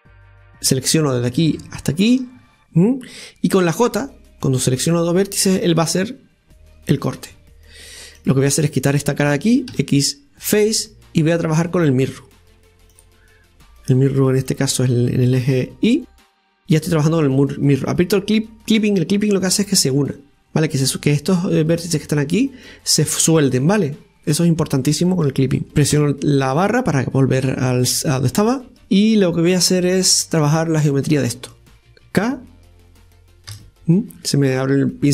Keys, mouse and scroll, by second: 0.3 KP_Divide, 0.5 click, 1.3-5.0 right drag, 8.2 click, 8.6-9.7 right drag, 10.5 x, 11.4-14.4 drag, 14.5 click, 15.4 click, 16.2 click, 16.3 scroll up 1, 16.7 scroll down 2, 18.8 scroll down 1, 18.8 click, 24.3 scroll down 2, 25.7 click, 25.9 KP_Divide, 26.7-27.3 scroll down 4, 27.7 scroll up 1, 28.2-30.4 scroll up 1, 30.4 Tab, 31.6 click, 33.5 k.